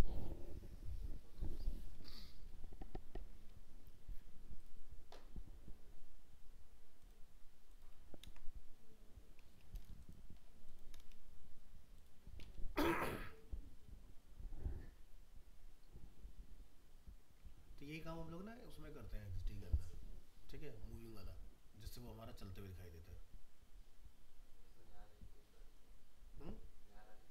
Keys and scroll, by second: 8.2 ctrl+v.